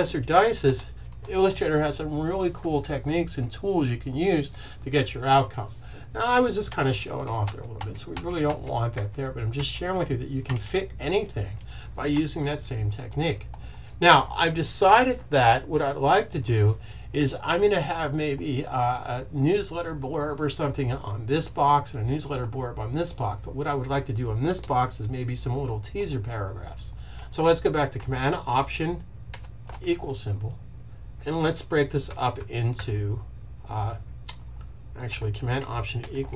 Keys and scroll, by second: 0.5 super+=, 7.0 super+z, 7.3 super+z, 7.7 super+z, 8.1 super+z, 8.4 super+z, 8.9 super+z, 9.4 super+z, 10.4 super+z, 12.0 super+s, 29.2 alt+super+=, 35.9 alt+super+=.